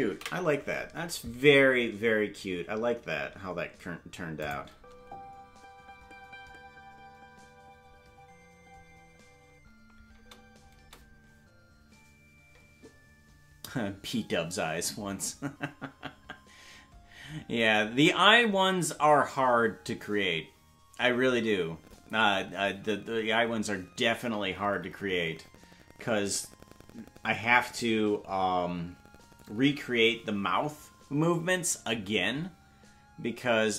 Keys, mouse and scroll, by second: 2.0 ctrl+s, 2.0 space, 4.4 click, 4.7 space.